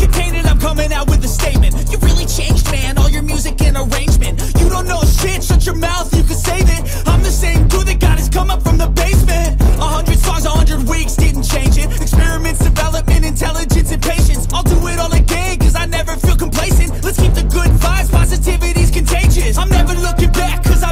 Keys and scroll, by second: 3.5-8.6 typing, 12.1-14.9 typing.